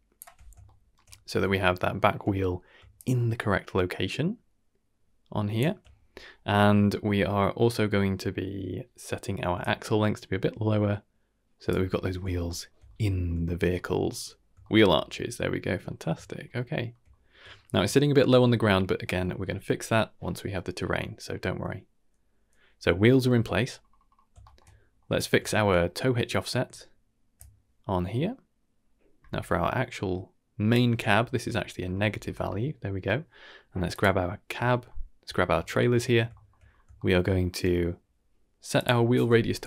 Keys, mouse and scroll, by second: 0.6 shift+middle drag, 1.0 middle drag, 1.4 shift+middle click, 1.9 shift+middle drag, 2.9 shift+click, 4.9 shift+click, 9.6-11.7 shift+drag, 12.4 shift+middle drag, 12.9 middle drag, 13.1 scroll down 2, 13.4 shift+middle drag, 13.7 middle drag, 14.0-14.5 scroll up 2, 14.6 shift+middle drag, 14.9-15.8 middle drag, 16.0-16.4 scroll down 2, 16.2 shift+middle drag, 16.7 shift+middle drag, 17.1 middle drag, 17.5 shift+middle drag, 18.3 scroll up 2, 18.6 shift+middle drag, 19.0 shift+middle drag, 20.2-23.2 middle drag, 23.8 scroll down 2, 24.4 shift+middle click, 24.4 scroll down 4, 24.6-24.9 middle drag, 25.1-25.6 scroll up 3, 25.4 shift+middle drag, 25.7 middle click, 27.3 shift+click, 32.2 scroll down 2, 32.5-33.0 middle drag, 33.2-33.9 scroll down 1, 33.9 click, 34.6 shift+middle drag, 35.6 shift+middle drag, 36.0 middle drag, 36.3 shift+middle drag, 36.6-37.0 scroll up 2, 36.9-37.5 shift+middle drag, 38.7 click.